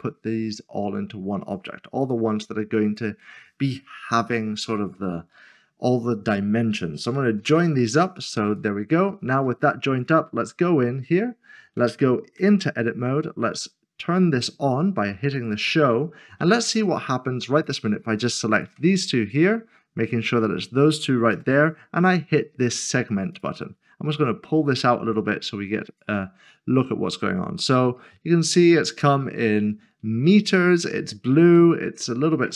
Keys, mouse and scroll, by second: 1.4 click, 7.4 ctrl+j, 10.7 click, 12.4 Tab, 15.4 Tab, 15.7 click, 19.0 middle click, 21.3 d, 23.3 click, 27.3 click, 27.5 scroll up 1, 28.0 middle click, 30.6 scroll down 1.